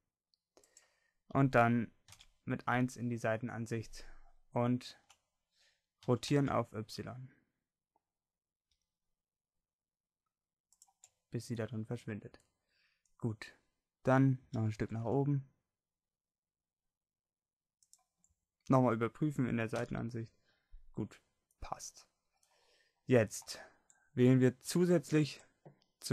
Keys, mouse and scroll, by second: 2.1 KP_1, 6.1 r, 14.0 middle click, 14.3 g, 19.7 KP_1.